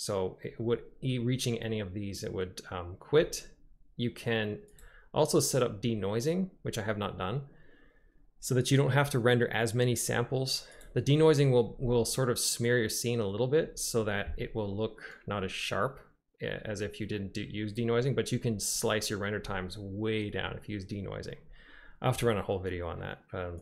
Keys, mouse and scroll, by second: 4.8 click, 10.8 click.